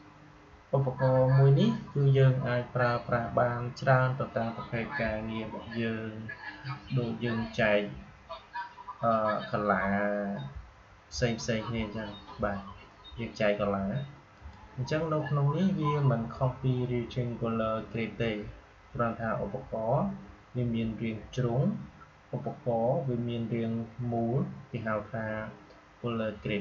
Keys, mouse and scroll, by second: 14.3 click.